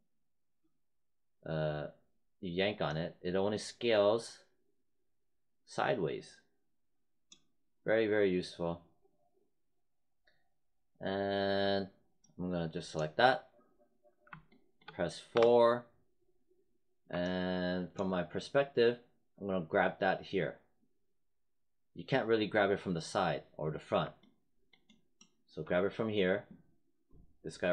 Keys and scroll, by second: 15.2 4.